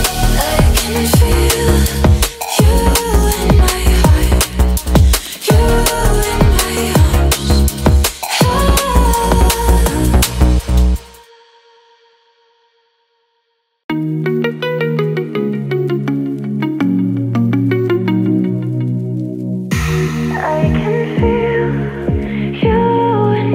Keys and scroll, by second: 14.6 Left, 15.8 Right, 17.5 space.